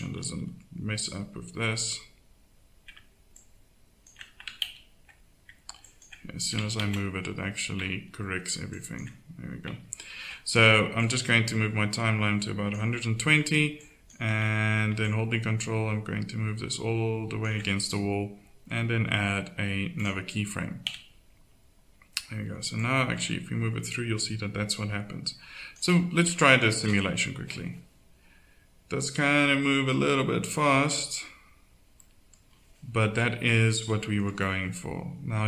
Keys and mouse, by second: 0.3 z, 1.2-4.1 middle drag, 4.7 ctrl+z, 6.8 ctrl+z, 10.2 ctrl+z, 13.8-16.8 drag, 20.3-24.6 drag, 20.8 z, 26.7 alt+a, 32.6-33.9 middle drag.